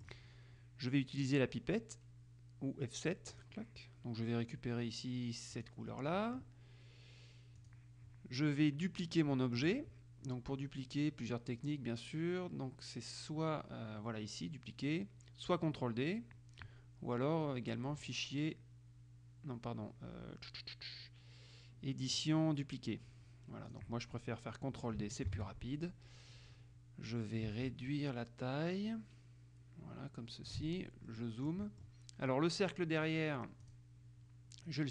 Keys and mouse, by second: 3.5 click, 5.7 click, 7.8 click, 18.2 click, 23.8 click, 25.4 ctrl+d, 28.0-31.1 ctrl+shift+drag, 31.2 click, 33.8 click.